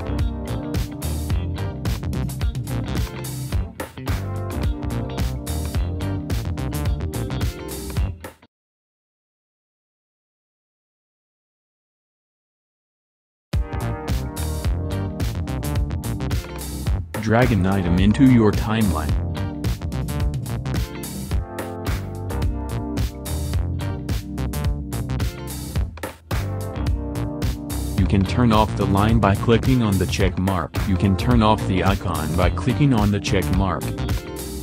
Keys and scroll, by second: 19.6 Home, 20.2 space, 25.4 space.